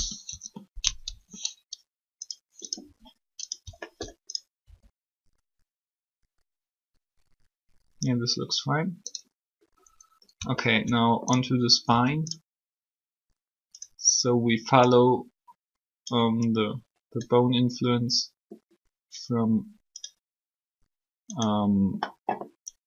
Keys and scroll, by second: 4.6 alt+shift+r, 11.8 alt+r.